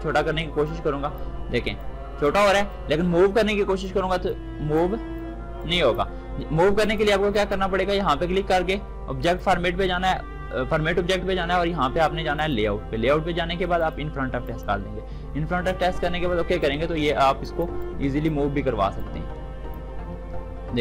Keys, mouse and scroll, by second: 0.4-6.6 drag, 7.1 right click, 8.9 click, 12.1-20.8 drag.